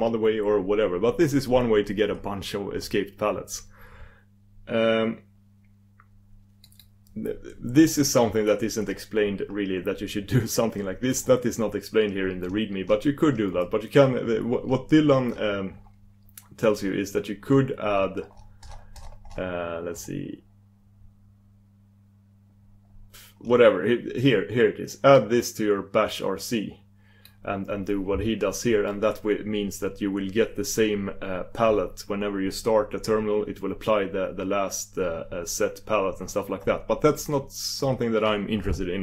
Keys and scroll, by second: 6.6 super+d.